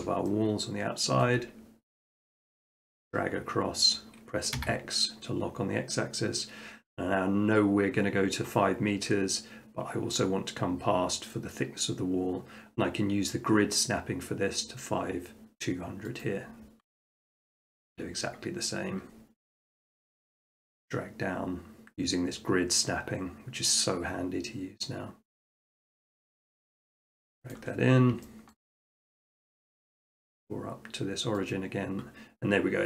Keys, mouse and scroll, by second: 1.2 shift+middle click, 4.6 x, 16.2 click, 17.0 middle click, 17.1 middle click, 17.9 shift+middle click, 18.4 middle click, 18.6 middle click, 18.7 middle click, 19.1 scroll, 25.9 click, 27.5 click, 27.8 middle click, 27.9 middle click, 28.5 shift+middle click, 29.0 middle click, 31.5 click.